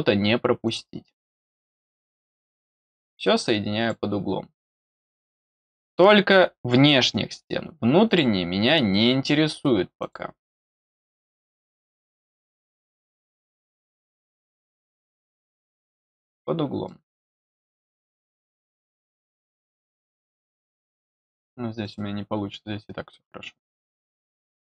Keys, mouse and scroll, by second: 0.6 click, 1.7 middle click, 2.4 middle click, 3.7 click, 5.4 click, 6.8 middle click, 8.0 click, 9.9 click, 11.7 click, 13.1 click, 14.6 click, 15.9 click, 16.8 middle click, 18.0 click, 19.6 click, 21.8 click, 24.1 middle click.